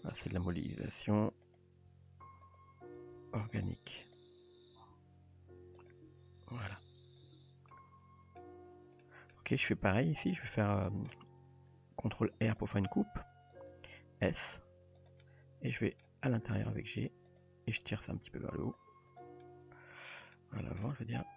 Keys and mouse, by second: 0.3-0.8 middle drag, 1.1 g, 1.9 r, 3.0 r, 4.8 r, 6.1 g, 7.3 Tab, 7.7-8.4 middle drag, 9.0-9.3 middle drag, 9.9 Tab, 10.9 middle drag, 12.2 ctrl+r, 14.4 s, 15.2 middle click, 16.6 g, 17.9 click, 18.1 g, 19.1 drag, 19.4-20.1 middle drag, 20.3-20.8 middle drag, 21.2 g.